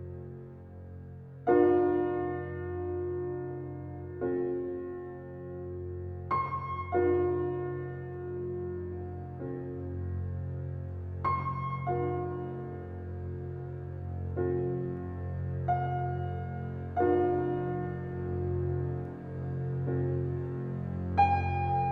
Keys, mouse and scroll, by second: 0.9-2.5 typing, 3.7 shift+', 5.3 click, 5.7 scroll down 1, 6.2 click, 6.5-7.0 scroll up 1, 7.0 scroll down 1, 7.7-8.0 scroll up 1, 8.0 scroll down 1, 8.5 scroll up 1, 8.9-9.2 scroll down 1, 9.5-10.1 scroll up 1, 10.2 scroll down 1, 12.4-13.6 scroll up 1, 13.6 click, 14.0 scroll down 1, 16.4 click, 18.6-19.2 scroll up 1, 19.2 scroll down 1, 20.2-21.6 drag, 21.6-21.9 scroll up 1.